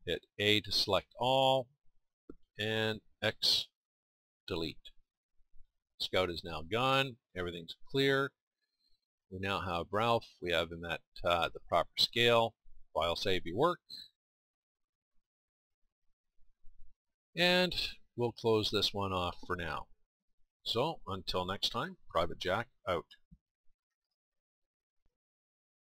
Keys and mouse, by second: 0.4 a, 2.2 a, 3.1 x, 7.5-10.9 drag, 12.5 middle click.